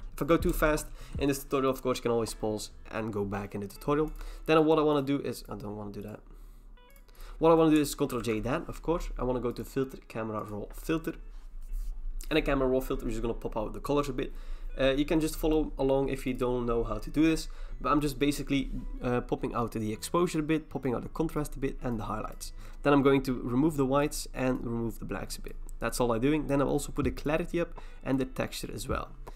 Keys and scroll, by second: 0.5 BackSpace, 8.2 ctrl+j.